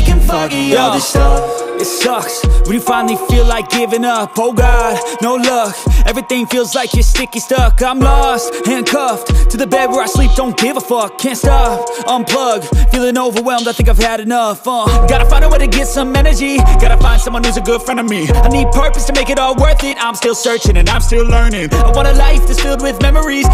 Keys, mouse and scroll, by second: 0.0 click, 6.5 click, 6.7 ctrl+click, 11.6 ctrl+click, 12.6 ctrl+click, 13.6 ctrl+click, 15.4 ctrl+click, 16.0 ctrl+click, 19.8 click.